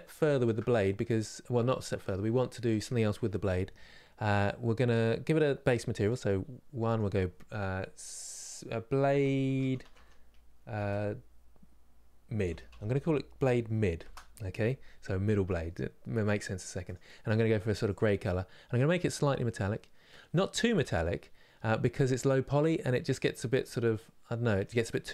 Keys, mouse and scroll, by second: 0.3-3.4 scroll up 2, 3.4-5.7 scroll up 1, 5.7-13.7 drag, 17.5 click, 19.3-22.6 drag, 22.6-25.1 middle drag.